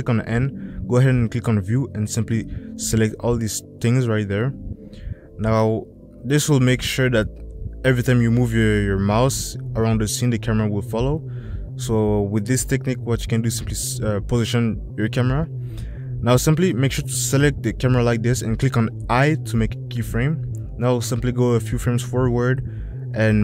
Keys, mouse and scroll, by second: 0.5 n, 10.4 shift+click, 11.9 shift+drag, 13.1 click, 14.5 drag, 19.4 i.